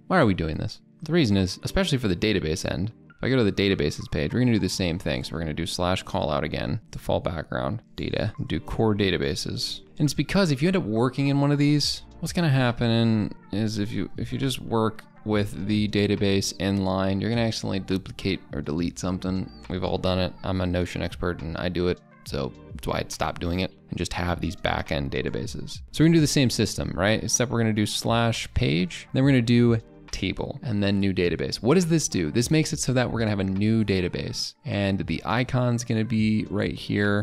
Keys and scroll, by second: 8.3 Caps_Lock, 9.9 ctrl+a, 10.1 ctrl+b.